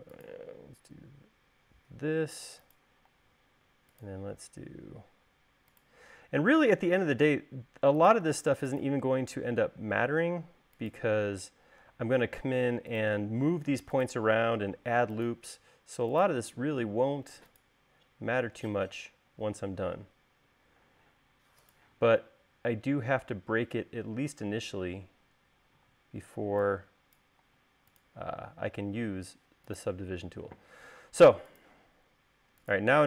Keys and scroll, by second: 3.5 l, 11.8 space, 18.7 space.